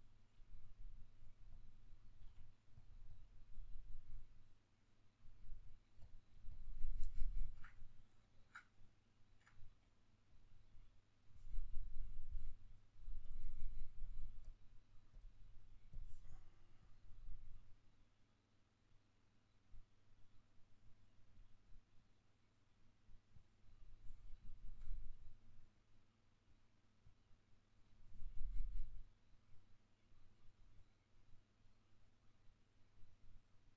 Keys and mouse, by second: 0.8 middle click, 1.2-2.6 drag, 2.0 f, 2.8-6.8 drag, 6.8-10.1 middle drag, 9.4 f, 10.1 click, 16.6-24.2 drag, 24.2-26.2 shift+middle drag, 26.2-27.7 drag, 27.7-29.8 shift+middle drag, 29.8-33.1 drag, 33.1-33.7 middle drag.